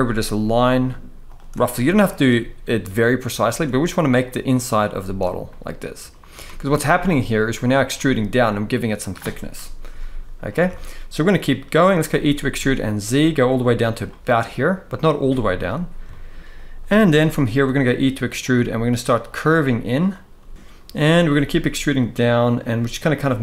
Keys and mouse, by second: 0.1 e, 1.4 shift+middle click, 3.1 e, 4.4 click, 5.2 shift+middle click, 6.2 z, 6.8 middle click, 7.7-8.8 middle drag, 9.2 KP_1, 9.6 z, 10.4 shift+middle click, 11.1 shift+middle click, 11.9 e, 12.2 z, 13.6 click, 15.0-15.3 shift+middle drag, 15.8 shift+middle click, 17.3-21.0 typing, 19.0 click, 19.8 click, 20.5 ctrl+z, 22.3 click, 22.4 e.